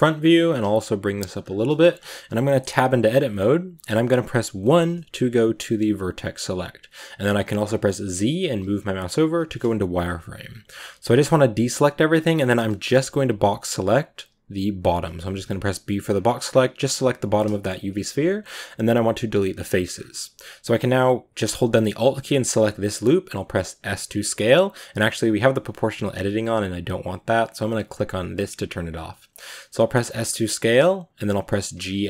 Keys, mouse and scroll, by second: 0.2 g, 1.5 shift+middle drag, 1.8-2.2 scroll up 2, 2.2 Tab, 4.4 1, 8.4 z, 9.1 a, 13.7 b, 16.3 b, 17.3-19.3 shift+middle drag, 19.3 x, 19.8-20.3 scroll up 3, 21.7 alt+right click, 22.5 scroll down 1, 23.2 s, 28.2 click, 29.7 s, 31.3 g.